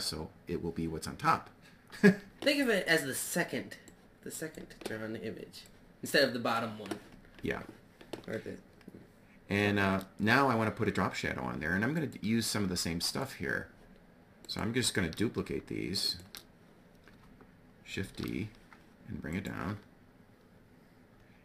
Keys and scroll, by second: 17.5 shift+d.